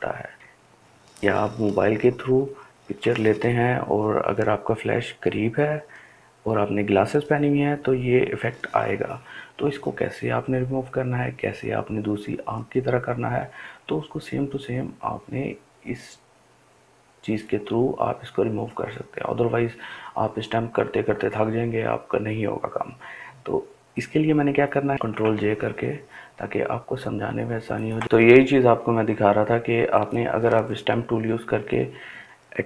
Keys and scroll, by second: 24.9 ctrl+j.